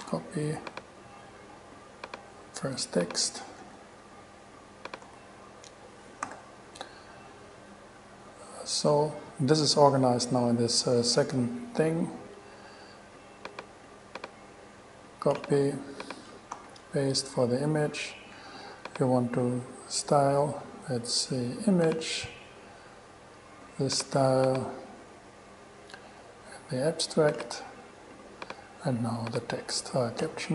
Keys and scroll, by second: 0.2 shift+super+c, 0.8 super+c, 3.8 super+v, 5.2 super+v, 6.4 super+z, 16.7 super+v.